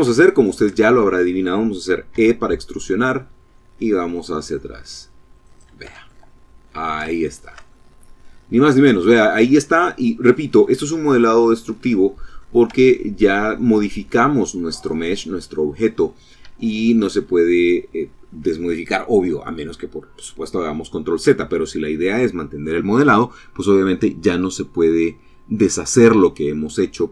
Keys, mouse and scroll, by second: 1.2 e, 4.5 click, 5.0 Tab, 5.6-6.1 scroll down 2, 6.3 shift+click, 7.1-8.4 middle drag, 9.4-11.0 middle drag, 11.2 middle click, 11.8 Tab, 12.3-14.1 middle drag, 15.6 Tab.